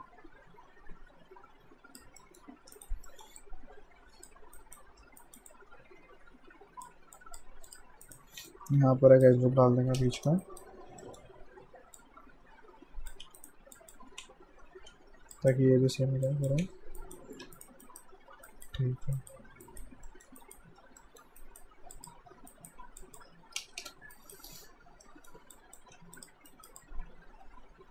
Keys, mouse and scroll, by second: 2.2 alt+middle click, 2.8 alt+right click, 3.1 alt+middle click, 3.4 alt+click, 4.6 alt+right click, 5.5 click, 8.1 right click, 8.5 right click, 10.0 space, 10.4 right click, 11.0 alt+middle click, 12.0 click, 13.3 q, 13.4 right click, 13.8 click, 14.1 r, 15.4 click, 15.4-17.4 typing, 17.0 alt+right click, 17.6 right click, 17.8 alt+right click, 20.1 alt+middle click, 20.4 alt+right click, 21.0 alt+middle click, 21.4 alt+right click, 21.9 click, 22.5 alt+right click, 23.0 click, 23.6 space, 24.1 alt+right click, 24.5 alt+scroll down 1, 25.0 middle click, 25.6 click, 26.0 q, 26.2 click, 26.5 right click, 26.8 click.